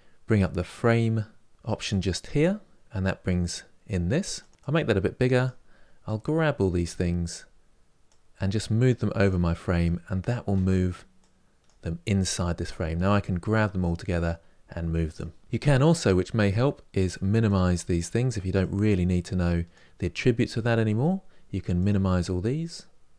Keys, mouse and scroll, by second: 10.9 drag, 12.4 click, 17.2 click, 21.5 click, 23.0 click.